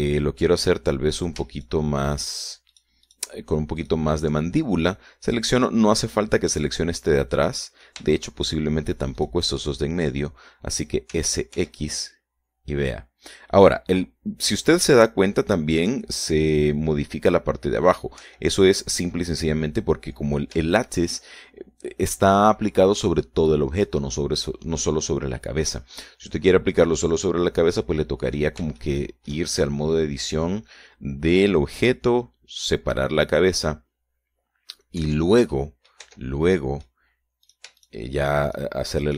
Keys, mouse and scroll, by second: 2.5 shift+right click, 2.9 shift+right click, 3.5 shift+right click, 4.1 shift+right click, 4.5 shift+right click, 5.1 shift+right click, 7.1 middle click, 8.3-9.4 middle drag, 9.7 shift+right click, 10.5 shift+right click, 10.9 shift+middle click, 12.5 s, 12.9 x, 19.6 Escape, 21.5-22.1 scroll down 3, 22.1 shift+right click, 28.8-29.4 scroll up 2, 30.1 shift+middle click, 36.4 Tab, 36.9 middle click, 37.4 Tab, 37.9 middle click, 38.9 shift+right click.